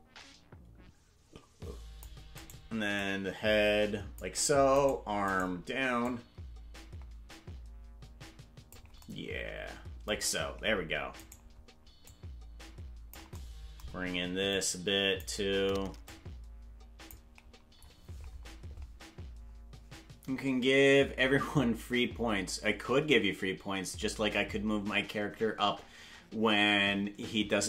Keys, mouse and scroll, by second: 2.5 right click, 3.0-4.2 shift+drag, 4.8 right click, 5.4 right click, 6.0-8.8 drag, 11.3 right click, 12.0-13.2 drag, 14.5 click, 16.1-17.2 drag, 18.6 click.